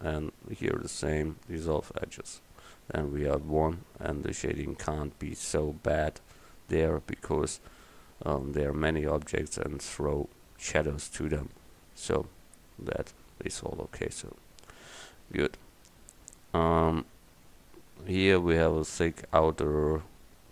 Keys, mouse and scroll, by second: 0.9 x, 3.4 Tab, 7.9-9.2 middle drag, 9.6 middle click, 10.0 middle click, 12.4 KP_1.